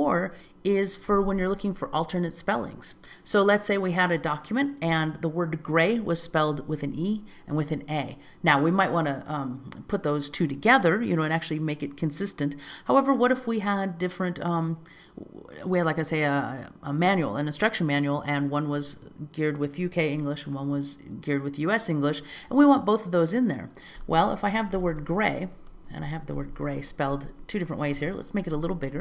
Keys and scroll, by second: 25.6 Return, 28.1 super+a.